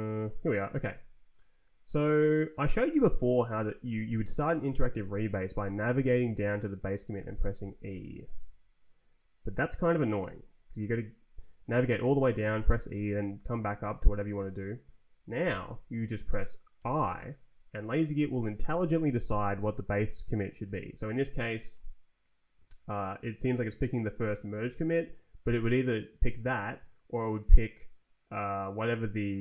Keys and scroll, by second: 0.2 Right, 5.5 Down, 6.3 Down, 7.1 e, 10.2 Escape, 10.8 Return, 11.5 Up, 12.3 Down, 13.4 Up, 15.8 Up, 16.7 i.